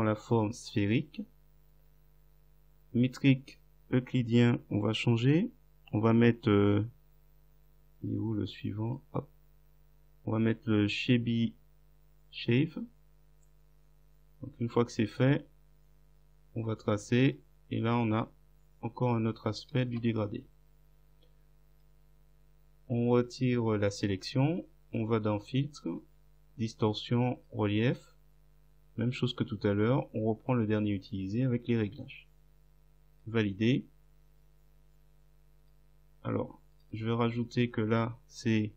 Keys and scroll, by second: 19.9 Return.